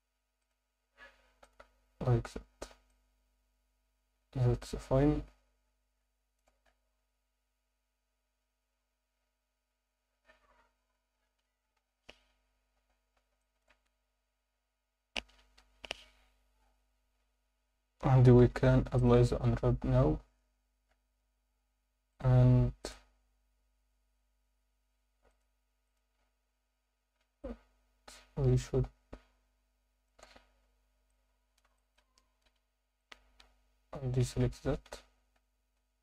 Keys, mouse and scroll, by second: 0.4-1.7 drag, 2.3 Tab, 2.9-6.4 alt+middle drag, 6.6-9.9 scroll up 3, 9.9 scroll down 2, 11.8 KP_7, 13.0-13.3 scroll down 1, 13.4 alt+shift+middle click, 15.6 ctrl+KP_Add, 18.4 u, 19.8 scroll down 3, 20.0 Tab, 20.9 Tab, 20.9 scroll up 2, 22.1-24.0 drag, 25.3-26.0 drag, 27.4-30.0 alt+middle drag, 31.1 alt+middle click, 31.7 shift+middle click, 32.5 c, 34.4 Escape, 34.7 z, 35.3 scroll up 2, 35.8 Tab.